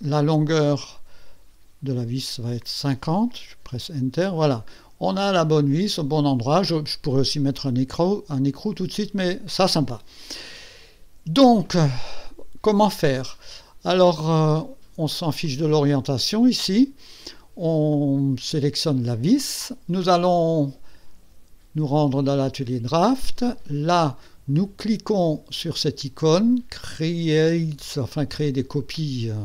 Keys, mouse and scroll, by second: 0.8 click, 2.3 click, 3.6 Return, 4.4-6.8 drag, 8.1-10.1 drag, 13.5 click, 15.4 click, 17.9 click, 20.0 click, 22.1 click.